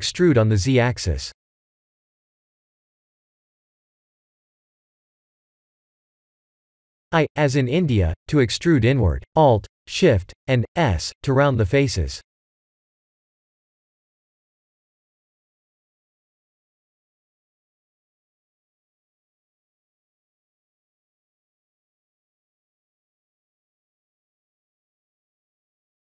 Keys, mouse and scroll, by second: 1.9-3.1 scroll down 3, 3.2 middle click, 3.7-4.1 middle click, 3.9 middle click, 4.1 middle click, 11.1 alt+shift+s, 18.2-19.1 scroll up 5, 19.1 middle click, 21.2 middle click, 22.6 middle click, 23.0 middle click, 23.9 middle click, 24.3-24.8 middle click, 24.6 middle click, 24.7 middle click.